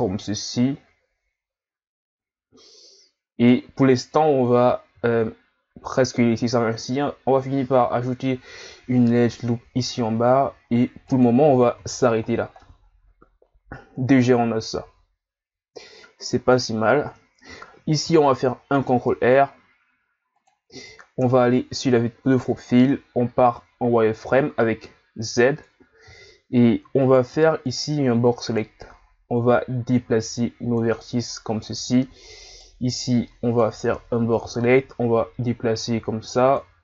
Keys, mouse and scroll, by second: 4.9 ctrl+r, 11.8 z, 12.2-12.6 scroll down 1, 12.6-15.6 middle drag, 18.0 ctrl+r, 21.2 KP_3, 22.4 z, 22.9-24.3 shift+scroll up 2, 26.2 scroll up 1, 27.0 right click, 27.3 b, 29.3 click, 31.0-31.5 scroll up 2, 31.5-32.2 ctrl+scroll down 1, 32.5 right click, 32.8 b, 34.3 click.